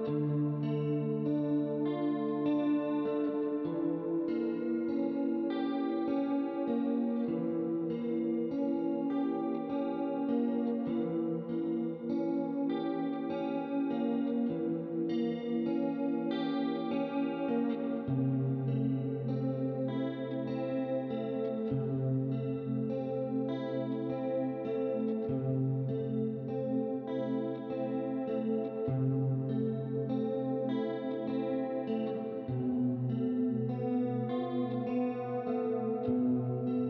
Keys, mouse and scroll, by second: 1.7 shift+click, 2.9 click, 3.9 shift+click, 4.9 click, 6.2 shift+click, 7.1 middle click, 8.7 click, 9.6 KP_1, 9.6 KP_0, 9.8 Return, 10.6 click, 12.0 click, 12.5 middle click, 13.6 click, 14.6 click, 16.0 middle click, 17.1 click, 18.2 KP_3, 18.3 Return, 19.8 click, 20.7 KP_1, 20.8 KP_0, 20.9 Return, 22.9 click, 27.6 click, 27.9 middle click, 29.2 click, 32.0 shift+click, 34.2 click, 35.2 click, 36.4 right click.